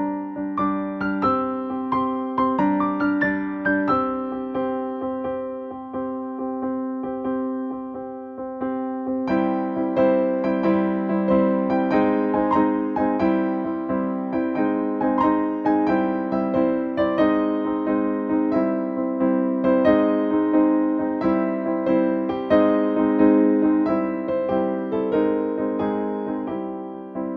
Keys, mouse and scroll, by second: 2.7-7.1 drag, 7.1-7.5 scroll down 1, 16.4 click, 20.9 click, 24.8 space, 26.7 click, 26.9 space.